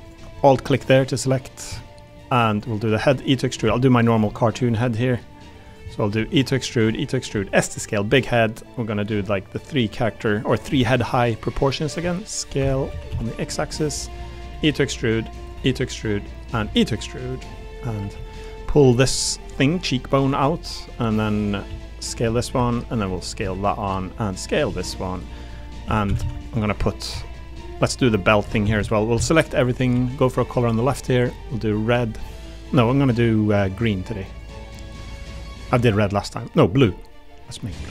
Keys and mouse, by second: 0.0 alt+click, 0.3 click, 1.0 click, 1.7 middle click, 2.9 e, 3.6 s, 4.3 click, 4.6 g, 5.6 click, 5.8 click, 6.1 e, 7.2 click, 7.2 e, 7.3 s, 8.5 middle click, 9.1 s, 10.3 middle click, 10.7 s, 11.1 click, 12.0 x, 12.6 Escape, 12.9 s, 13.1 x, 14.0 click, 14.2 click, 14.5 e, 15.4 click, 15.6 e, 16.6 e, 17.9 click, 18.1 2, 18.6 click, 18.9 click, 19.6-21.0 drag, 21.1 3, 21.4 click, 21.6 s, 22.0 click, 22.5 2, 23.1 click, 23.4 s, 24.3 click, 24.6 s, 25.3 click, 25.8 2, 26.1 a, 26.2 a, 26.4 alt+click, 26.9 middle click, 27.1 s, 27.7 click, 28.4-30.3 typing, 34.4 click, 35.0 g, 35.9 click, 36.8 g.